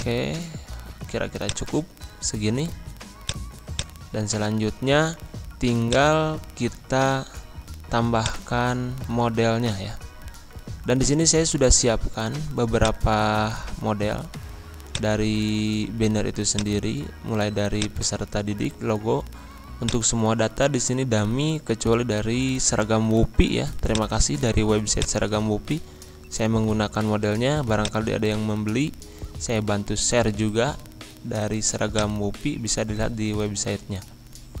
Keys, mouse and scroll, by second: 8.1 click, 9.2-9.6 scroll down 1, 10.0 scroll up 1, 11.7 click, 13.3 click, 14.0-14.8 scroll up 1, 14.8 click, 18.5 scroll down 1, 19.3 z, 19.8-23.9 drag, 25.8 scroll up 1, 27.8 click, 31.9 click.